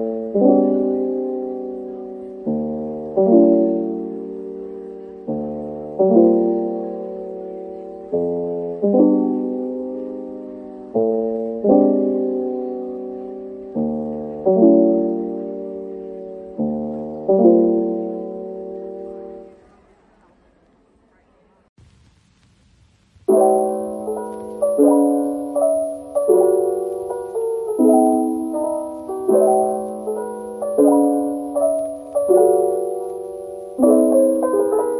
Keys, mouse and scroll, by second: 0.0-0.7 typing, 1.0 scroll down 1, 2.9 double click, 3.7-6.6 typing, 7.7 double click, 8.0-10.0 typing, 10.1 Return, 10.9-11.3 scroll down 1, 11.3 middle click, 12.6 scroll up 1, 14.1-14.5 scroll down 1, 14.5 middle click, 23.5 z, 23.9 scroll down 1.